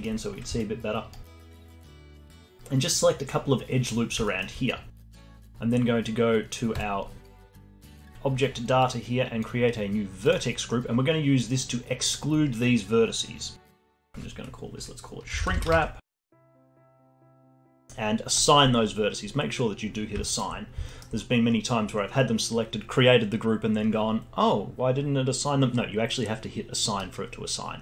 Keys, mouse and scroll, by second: 0.3 click, 0.7 alt+middle click, 1.4 alt+right click, 2.1-6.7 alt+middle drag, 6.7 click, 7.4-8.8 alt+middle drag, 8.8-13.3 drag, 13.8-17.1 drag, 18.3-20.3 drag, 20.3-23.9 alt+middle drag.